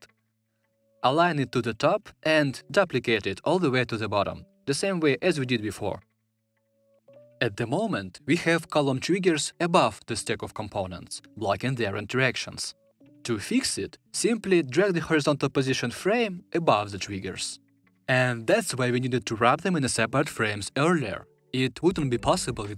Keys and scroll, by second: 4.5 super+d.